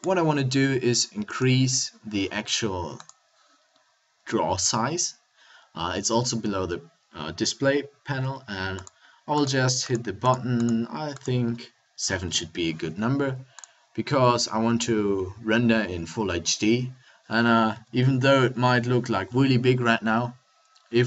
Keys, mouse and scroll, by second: 17.8 a.